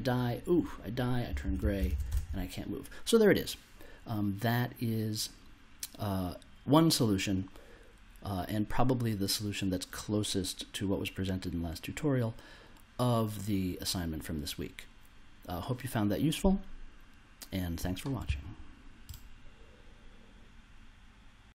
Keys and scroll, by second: 1.0-2.6 typing.